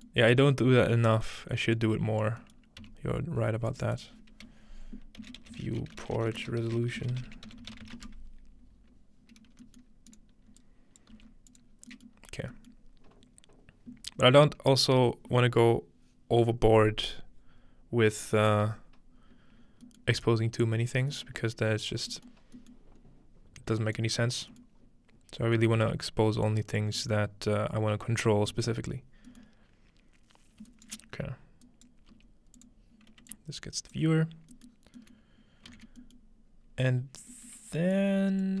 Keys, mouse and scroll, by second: 0.4 scroll up 2, 1.2 scroll up 2, 1.8 click, 2.8 n, 2.9-5.7 drag, 2.9-3.3 scroll up 1, 5.2-8.5 typing, 9.2 scroll down 2, 9.6 scroll up 2, 9.7 middle click, 10.1-12.5 drag, 11.2 g, 11.8 scroll down 1, 12.5-13.3 scroll down 1, 19.6 scroll down 2, 19.9-21.1 middle drag, 20.1 scroll up 2, 21.3 middle click, 21.5-21.8 scroll up 1, 22.3-23.6 scroll up 2, 24.0-25.8 drag, 24.8-25.2 scroll down 1, 25.2 scroll up 1, 25.8 middle drag, 26.0-28.1 scroll up 3, 26.1-26.5 middle drag, 26.5-28.6 drag, 28.1 scroll down 2, 28.7-30.3 middle drag, 28.7-30.3 scroll down 1, 30.7-31.6 shift+right drag, 31.8 right click, 32.1 g, 32.6 click, 33.3 alt+click, 34.7-36.5 scroll down 1, 35.7 typing, 36.5-38.6 scroll up 1, 38.0 click.